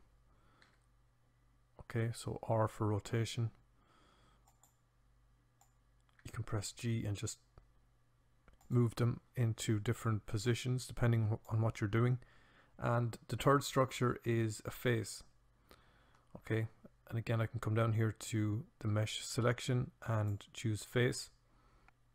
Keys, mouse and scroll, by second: 0.6 r, 4.5-6.1 drag, 6.1 g, 10.4-11.5 drag.